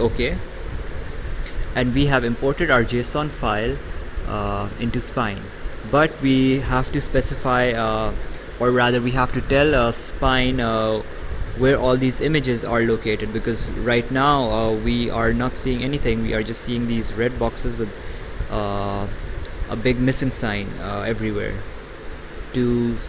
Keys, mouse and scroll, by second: 0.5 click, 3.4 right click.